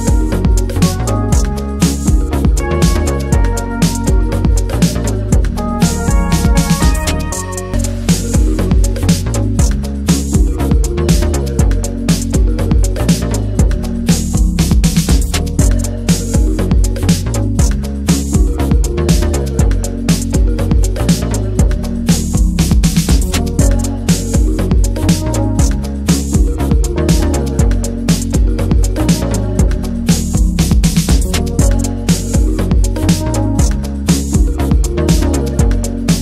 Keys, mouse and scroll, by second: 0.0 scroll up 1, 0.1 shift+middle click, 0.7 ctrl+b, 3.1 Tab, 3.3 middle drag, 3.6 Tab, 3.8-4.2 middle drag, 4.2 scroll down 1, 4.4-5.9 middle drag, 5.9 shift+click, 6.2 alt+shift+click, 6.4 alt+shift+click, 7.1 alt+shift+click, 7.3 alt+shift+click, 7.7 alt+middle click, 8.2 alt+z, 8.6 click, 9.1 s, 9.9 alt+z, 10.1 middle click, 10.7 s, 11.3 scroll down 2, 11.5 Tab, 11.6 middle click, 12.0 scroll down 1, 12.7 ctrl+s, 13.1 scroll down 1, 13.3 middle drag, 13.5 Tab, 13.7-14.5 middle drag, 14.5 3, 14.8 alt+shift+click, 16.2 2, 16.3 click, 17.1 middle click, 17.4 shift+d, 18.1 alt+middle click, 18.6-19.1 shift+middle drag, 19.1 e, 19.5 alt+s, 23.2-23.6 middle drag, 23.6 Tab, 23.8 click, 24.0 ctrl+a, 24.2 Tab, 24.4-25.0 middle drag, 25.0 3, 25.7 click, 26.1 alt+shift+drag, 26.7 shift+middle click, 27.2 r, 28.4 alt+middle click, 29.3 p, 29.8 Tab, 29.9 drag, 30.4 Tab, 31.3 1, 32.3 click, 32.5 l, 33.7 click, 34.4 shift+click, 34.9 s, 35.7 alt+z, 36.0-36.2 shift+drag.